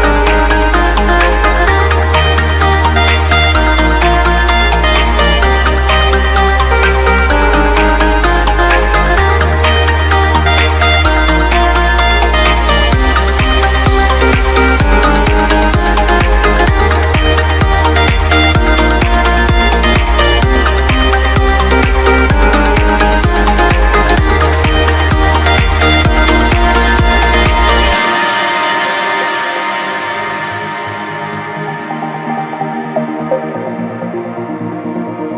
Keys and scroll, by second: 5.3 ctrl+z, 10.6 Escape, 10.9 F4, 13.9 ctrl+z, 15.4 c, 15.5 e, 16.0 shift+F2, 16.3 Escape, 17.2 alt+c, 17.2 alt+w, 17.7 p, 18.4 F3, 20.5 Escape, 20.8 F3, 23.6 Escape, 26.2 Delete.